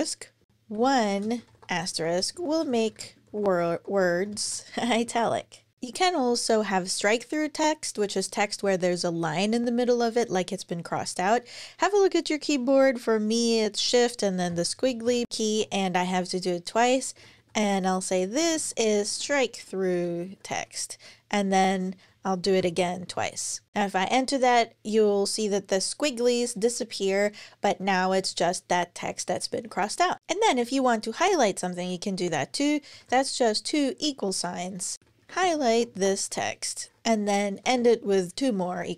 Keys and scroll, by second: 0.0-3.3 typing, 5.5-6.2 typing, 14.3 shift+`, 14.8 shift+`, 16.7-20.8 typing, 22.2 shift+`, 22.4 shift+`, 23.7 Return, 31.0 Return, 32.7 typing, 34.7-37.9 typing.